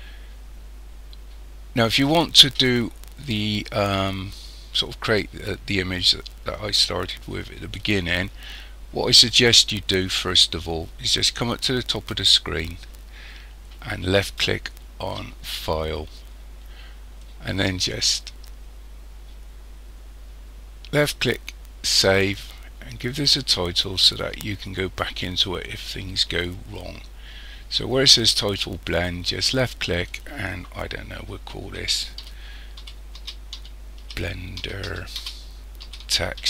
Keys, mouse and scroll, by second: 15.5 click.